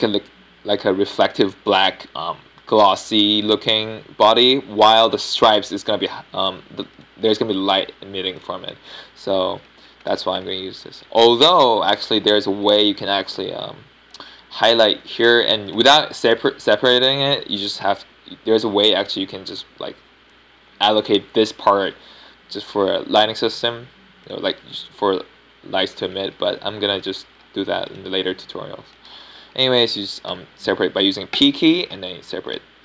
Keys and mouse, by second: 6.7 middle click, 7.1 Tab, 7.5 Tab, 8.1 Tab, 9.5 Tab, 10.0 Tab, 11.0 Tab, 11.4 Tab, 11.6-12.0 right drag, 12.2 Tab, 12.4 right click, 16.6-19.9 middle drag, 26.2-28.2 middle drag, 29.8-32.8 middle drag, 32.2 p.